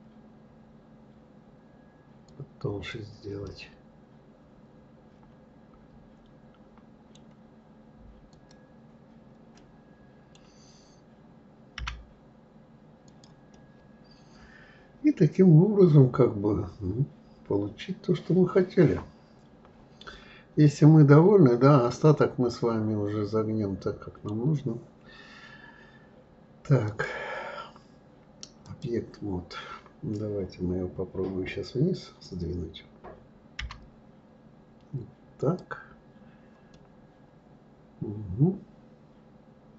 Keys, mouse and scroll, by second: 3.4-6.5 middle drag, 8.3 click, 9.6-11.8 middle drag, 11.8 g, 13.5-16.6 middle drag, 26.8-29.9 drag, 36.7-39.7 middle drag.